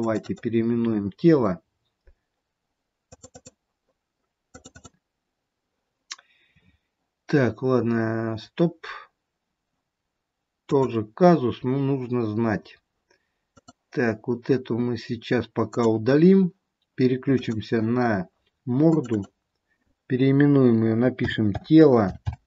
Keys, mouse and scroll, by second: 0.3 click, 0.7 click, 3.9 click, 4.8 click, 10.7 click, 13.6 click, 17.4 click, 19.1 click.